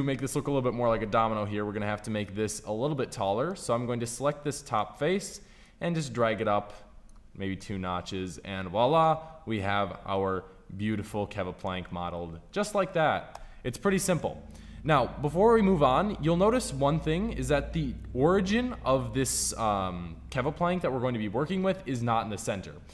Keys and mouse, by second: 5.5-7.6 drag, 5.5 right click, 13.2 Tab.